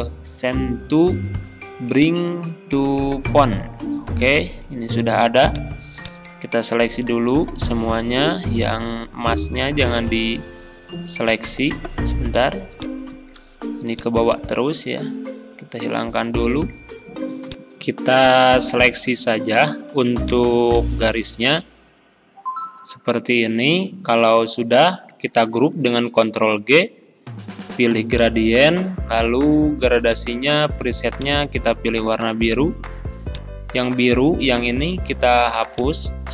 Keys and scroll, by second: 26.1 ctrl+g.